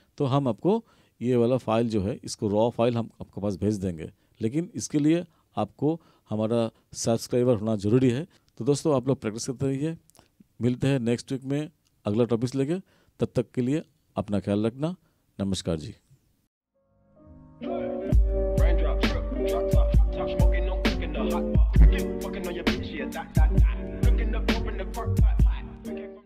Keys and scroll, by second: 0.4 ctrl+=.